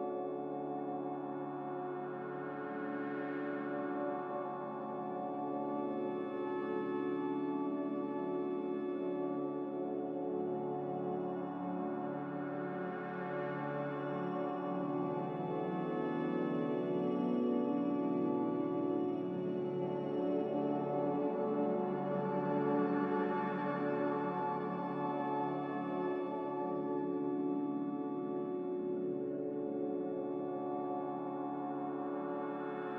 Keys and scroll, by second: 4.0 ctrl+z, 7.4 ctrl+z, 10.4 5, 10.6 Return, 21.4 a, 23.0 z, 30.9 a.